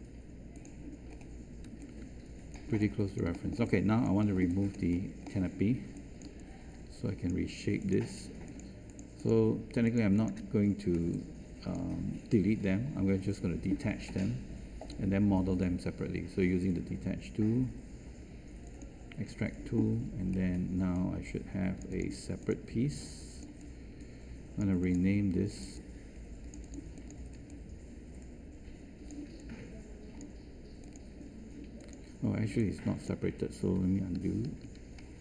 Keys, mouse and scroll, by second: 1.6 space, 34.2 z.